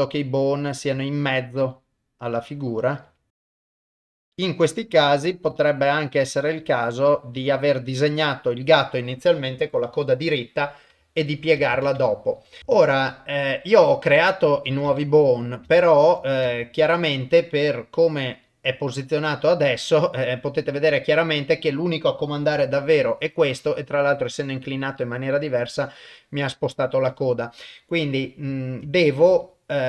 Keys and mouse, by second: 0.1 click, 0.9 g, 1.7 click, 2.4 click, 3.1-4.2 typing, 3.4 click, 3.6 click, 3.8 click, 4.0 click, 4.2 click, 4.5 click, 5.1 click, 6.8 click, 7.4 g, 11.1 shift+middle click, 11.8 ctrl+s, 12.1 shift+middle click, 14.9 ctrl+Tab, 15.8 ctrl+Tab, 19.2 click, 22.6 r, 25.0 click, 28.8 ctrl+Tab, 29.4 click.